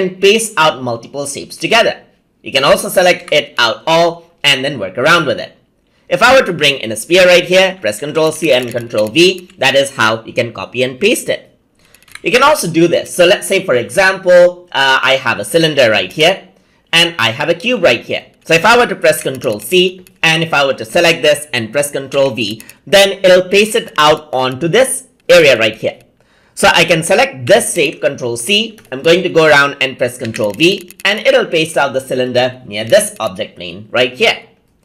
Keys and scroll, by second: 7.4 ctrl+c, 7.6 ctrl+v, 19.0 ctrl+c, 21.9 ctrl+v, 27.3 ctrl+c, 30.0 ctrl+v.